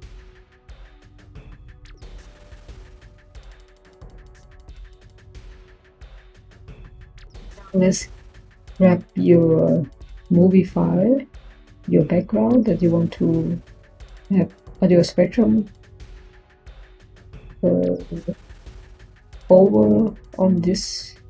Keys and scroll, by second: 3.3-4.7 typing, 10.7 Tab.